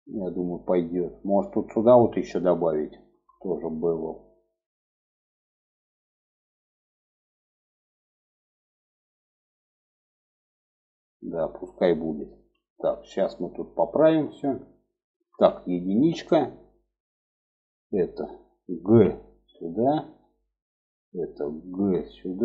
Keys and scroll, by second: 14.6 1, 18.2 g, 21.1 g.